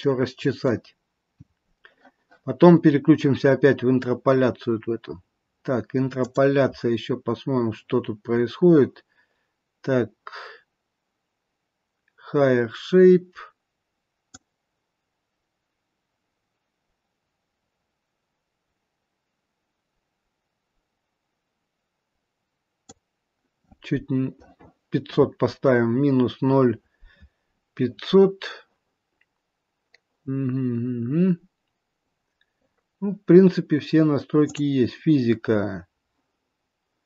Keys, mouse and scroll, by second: 0.0 middle click, 0.9-3.0 scroll down 1, 7.2 click, 9.3-11.0 scroll down 2, 14.3 click, 31.0-32.0 scroll up 1, 32.0-34.4 scroll up 7, 34.4 click.